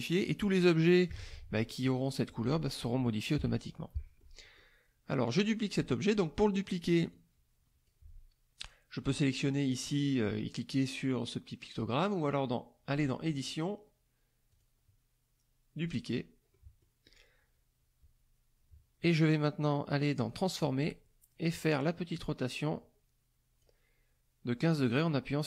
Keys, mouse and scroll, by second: 3.3 KP_Subtract, 3.9-4.8 middle drag, 7.1 click, 13.3 click, 14.5 click, 16.1 click, 16.5 middle click, 20.1 click, 21.9-23.8 drag.